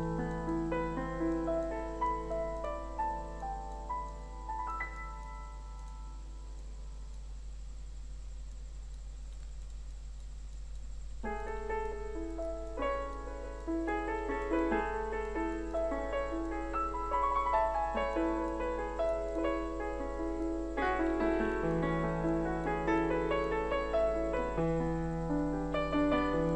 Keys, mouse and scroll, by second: 0.4 F2, 0.6 click, 1.6 click, 2.3 click, 9.6 Escape, 9.9 click, 11.4 Escape, 11.7 click, 11.9 F3, 12.1 click, 12.6 right click, 12.9 click, 14.5 F2, 14.7 click, 18.8 click, 19.8-20.7 scroll down 1, 20.7 click, 21.6 F2, 21.8 click, 24.7 KP_Add, 25.9 scroll down 1.